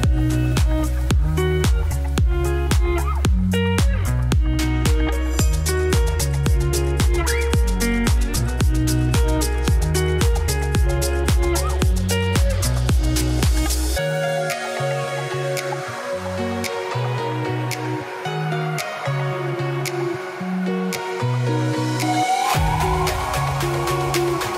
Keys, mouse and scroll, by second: 1.0-1.6 scroll down 1, 1.6 shift+middle click, 1.8 scroll down 1, 2.3 z, 3.7 shift+middle click, 4.4 click, 4.9 shift+middle click, 5.0 z, 5.2-7.9 scroll up 6, 7.9-8.4 scroll up 1, 8.4 shift+middle click, 9.3 click, 9.6-10.8 scroll up 5, 9.8 shift+middle click, 10.8 click, 16.7 g, 17.7 scroll down 3, 18.0 middle click, 18.4 Tab, 18.6 middle click, 19.2-20.1 scroll down 3, 20.1 click, 20.3-20.9 scroll down 4, 20.9 z, 22.9-23.3 scroll up 3, 23.3 shift+middle click, 23.5 click.